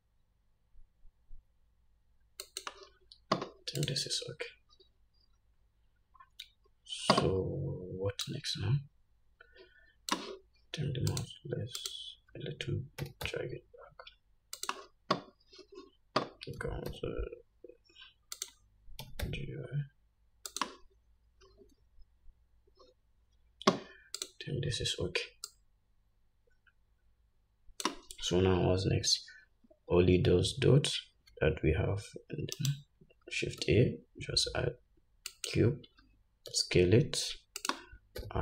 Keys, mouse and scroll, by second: 4.0 click, 5.7 scroll down 2, 8.5-11.5 drag, 12.1 shift+click, 13.3 g, 16.9 s, 19.3 g, 24.5 click, 25.8-38.0 drag, 30.0-31.6 scroll up 3, 32.8 shift+right click, 33.9 shift+a, 36.8 s.